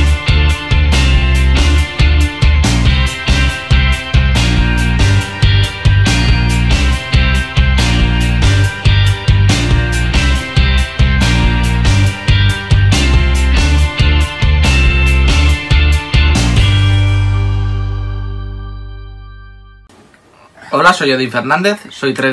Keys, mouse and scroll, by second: 2.3 ctrl+shift+n, 3.6 ctrl+shift+u.